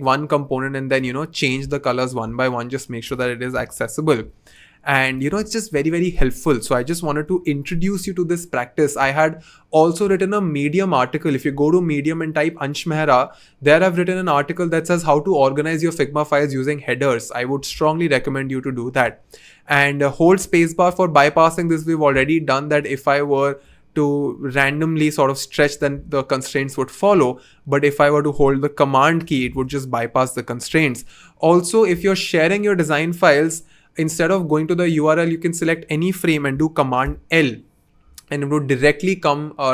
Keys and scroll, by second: 3.3 f, 3.6 Return, 7.2 BackSpace, 13.5 g, 22.0 v, 25.9 super+z, 29.5 super+z, 37.0 super+l.